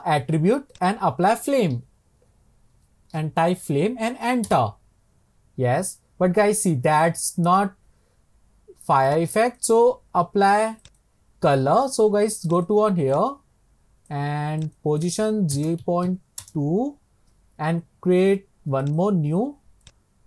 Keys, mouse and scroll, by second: 1.6-4.5 drag, 9.2-14.8 drag, 15.3-18.8 drag, 19.0-20.2 drag.